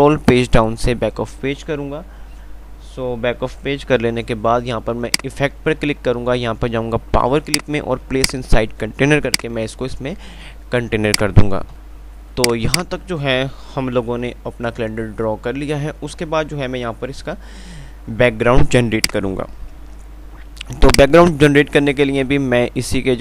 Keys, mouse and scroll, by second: 5.3 click, 5.3 typing, 11.8-12.5 typing, 12.0 click, 19.2 click, 21.1 ctrl+click.